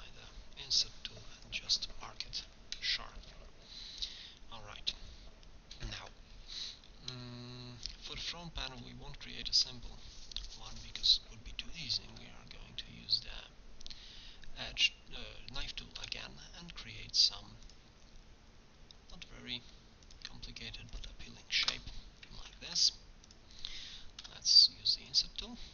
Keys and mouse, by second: 2.3-4.9 middle drag, 4.9 KP_1, 10.2-15.5 middle drag, 12.2 k, 22.6 ctrl+Tab, 24.2 i.